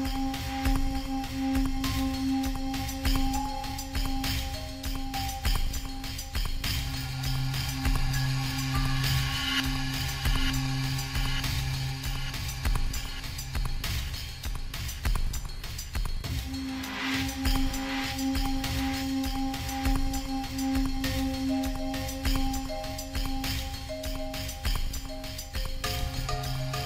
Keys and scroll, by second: 21.1-22.1 typing, 24.2 [.